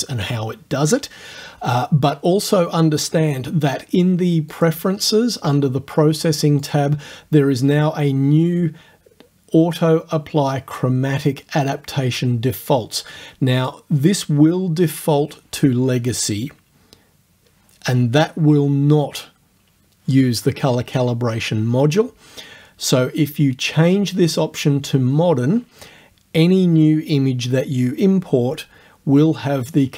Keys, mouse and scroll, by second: 3.8 click, 6.7 click, 13.6 click, 24.4 click.